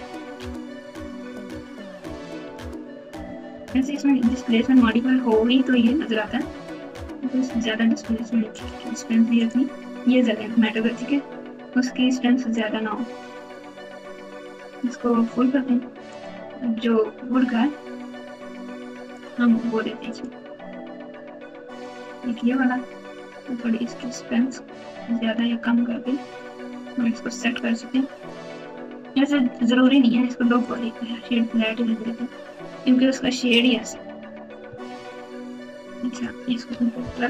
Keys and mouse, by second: 0.3 z, 1.5 alt+z, 2.0 alt+z, 3.5-4.8 typing, 5.7 KP_Subtract, 8.5 click, 9.4-10.7 drag, 12.5-14.8 drag, 16.1 click, 19.1 click, 20.1-21.9 drag, 24.0-28.5 drag, 29.9 click, 30.5-31.6 right drag, 34.9 Tab, 35.5 Tab, 35.9 Tab, 37.0 ctrl+KP_Add.